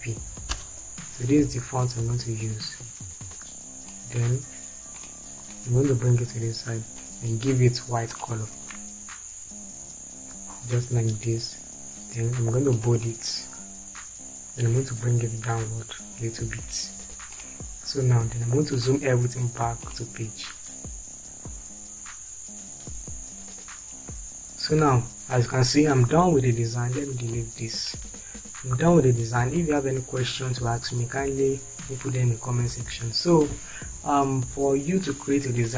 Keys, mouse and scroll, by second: 0.0 g, 0.6 Return, 16.1 Down, 28.7 Delete.